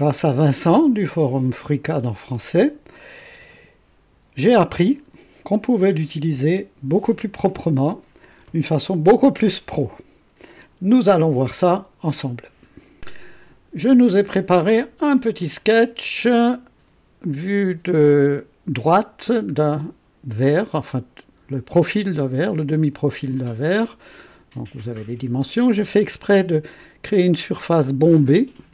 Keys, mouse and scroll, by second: 15.4 click, 16.0 click, 19.2 scroll down 1, 19.6 right click, 20.4 click.